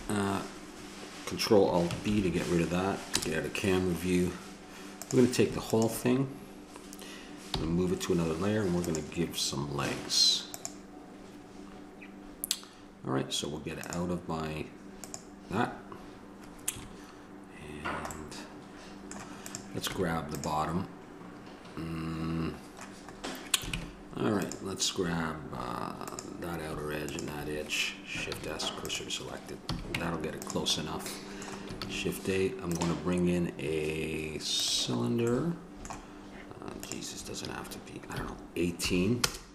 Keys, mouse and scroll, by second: 0.0 Escape, 2.3 ctrl+alt+b, 3.3 KP_0, 7.7 m, 10.7-16.9 drag, 16.9 KP_Decimal, 19.7 click, 20.1 Tab, 23.6-26.3 middle drag, 24.0 ctrl+Tab, 28.6 shift+s, 29.9 a, 30.2 Tab, 32.0 shift+a.